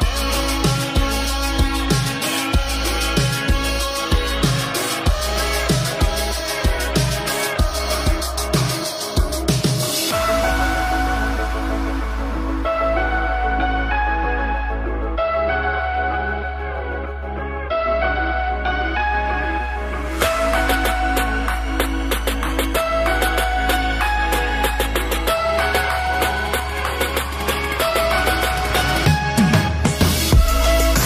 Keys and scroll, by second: 5.3 ctrl+space.